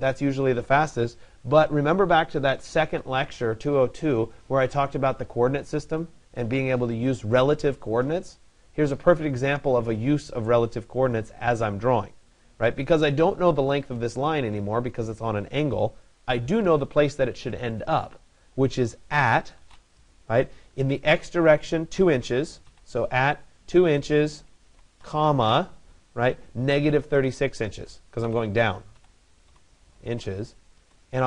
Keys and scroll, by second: 30.3 Return.